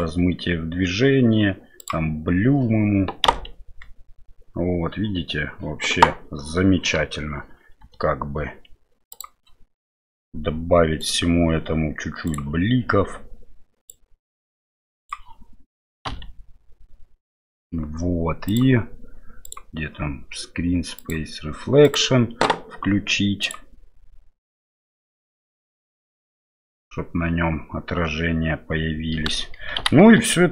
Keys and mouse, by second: 1.8 click, 11.0 right click, 13.9-15.2 drag, 18.6 F12, 19.4 click, 21.0 click, 21.9 click, 23.7 click, 29.8 shift+Left.